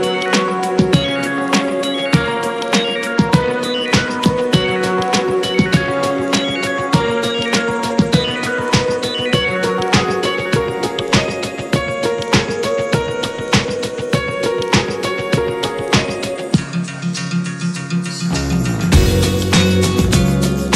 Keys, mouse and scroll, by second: 0.1 click, 1.3 drag, 2.1 click, 3.1 click, 4.1 click, 7.3-10.5 drag, 10.5 scroll up 7, 10.9-11.5 middle drag, 11.5 s, 12.2-12.6 middle drag, 12.6 scroll up 2, 12.9-14.0 middle drag, 14.0 click, 14.1-15.1 scroll down 12, 14.6 shift+middle drag, 15.1 middle drag, 15.2 scroll up 2, 15.4-17.6 shift+middle drag, 17.6 n, 17.9 click, 18.5-19.5 shift+middle drag, 19.5 ctrl+s.